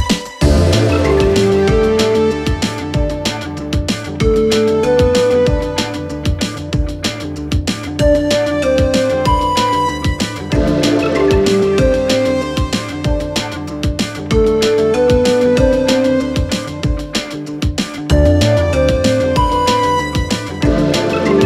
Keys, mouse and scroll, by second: 0.6 s, 6.6 g, 8.4-10.4 drag, 11.4-12.7 drag, 13.4 z, 16.0 a, 16.6-17.0 scroll down 3, 17.0 click, 17.6 click, 17.9 click, 18.6 click, 18.9-19.2 scroll down 2, 19.2-19.8 scroll up 2, 19.8 alt+click, 20.1 alt+click, 20.5 3, 21.4 alt+click.